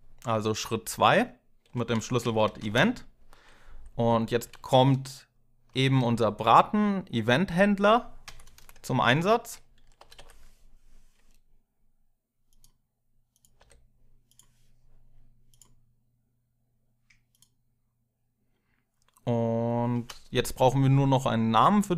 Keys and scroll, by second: 1.3-6.2 typing, 8.0 Tab, 8.8 Up, 9.8 ctrl+r, 9.9 ctrl+r, 13.4 i, 19.7 space.